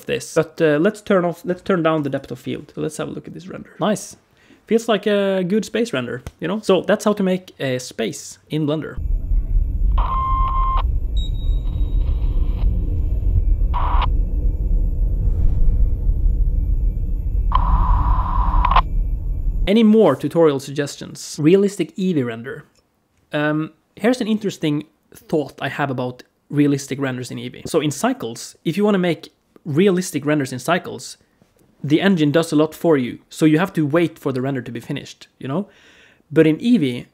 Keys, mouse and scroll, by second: 0.3 click, 1.3-1.8 scroll down 2, 1.8 click, 2.9 F12.